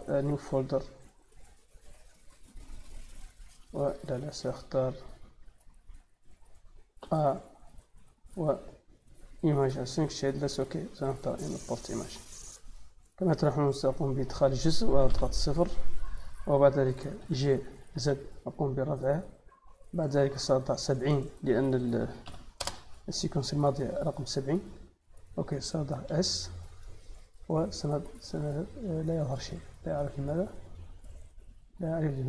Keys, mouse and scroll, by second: 0.0 click, 0.2 click, 1.0 click, 1.1 click, 4.9 click, 7.0 a, 11.1 click, 12.4 middle click, 13.6 click, 17.8 z, 18.7 click, 20.7 click, 25.8 s, 26.5 click, 27.9 click, 28.5 middle click, 29.5 middle click, 30.5 click, 31.0-32.2 middle drag.